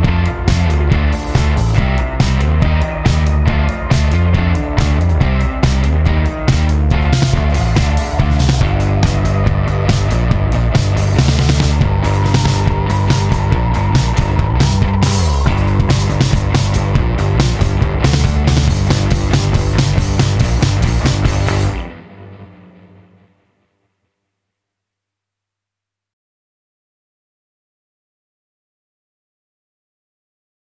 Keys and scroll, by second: 0.0 super+z, 10.1 super+s, 12.5 super+t, 16.9 alt+shift+Return, 17.5 super+t, 20.9 alt+shift+super+s, 21.1 super+Return, 21.9 super+t, 24.2 alt+shift+super+s, 24.4 super+Home, 24.6 Return, 27.1 super+t, 29.6 alt+shift+super+s, 29.9 Return.